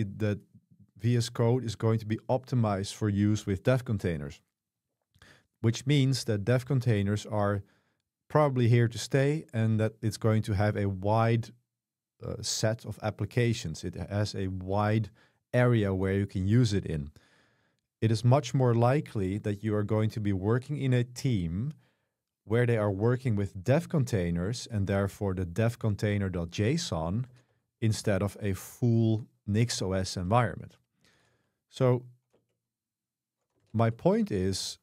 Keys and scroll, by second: 18.2 super+3, 27.3 ctrl+b, 27.5 3, 30.0 ctrl+b, 30.3 3, 31.2 ctrl+b, 32.4 Return, 33.6 ctrl+b.